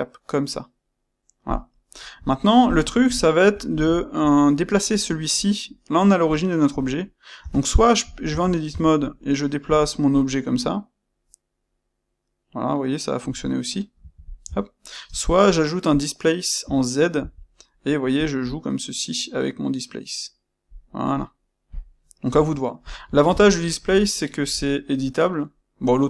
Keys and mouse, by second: 2.2-3.7 shift+middle drag, 3.7 click, 3.9-21.6 ctrl+middle drag, 7.3 Tab, 8.2 a, 14.0 Escape, 14.4 Tab, 15.0 space, 21.6-22.8 shift+drag, 23.1-26.0 ctrl+shift+middle drag.